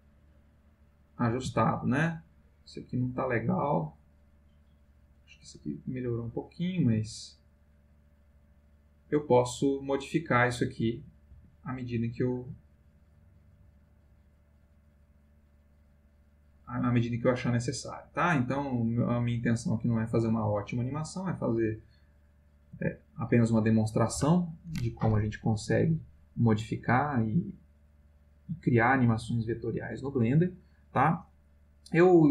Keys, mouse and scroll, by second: 1.1 click, 1.3 g, 2.0 click, 3.0-5.3 drag, 5.4 space, 11.3 Escape, 12.0-22.5 drag, 22.7 space.